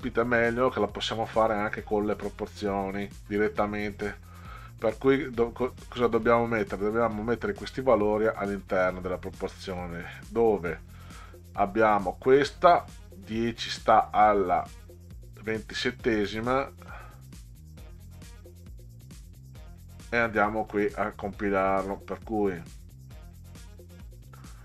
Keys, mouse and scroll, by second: 0.1 click, 5.9 click, 19.5 click, 22.1 click.